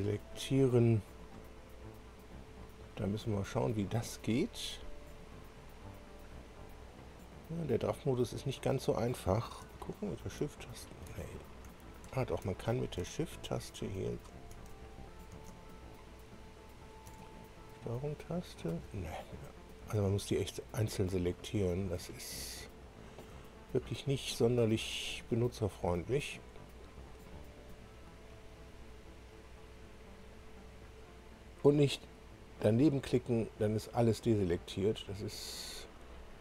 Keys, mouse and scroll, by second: 0.0 click, 0.6-1.5 drag, 7.9 click, 9.7 shift+click, 12.5 shift+click, 13.1-14.4 shift+drag, 15.7-17.0 ctrl+shift+drag, 17.5-18.8 ctrl+shift+drag, 20.3 click, 23.6-24.0 ctrl+scroll up 1, 24.8 ctrl+click, 25.7 ctrl+click, 26.8 ctrl+click, 27.9 ctrl+click, 29.4 ctrl+click, 30.5 ctrl+click, 31.2 ctrl+click, 33.2 ctrl+click, 34.5 ctrl+click, 35.4 ctrl+click.